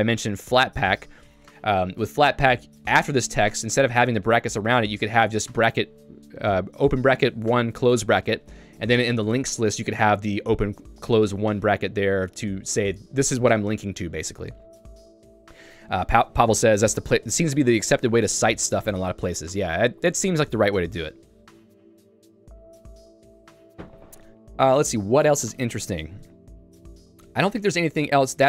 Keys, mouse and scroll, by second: 4.9 click, 15.7 Escape, 26.1 ctrl+d, 26.3 ctrl+d, 28.1 ctrl+u.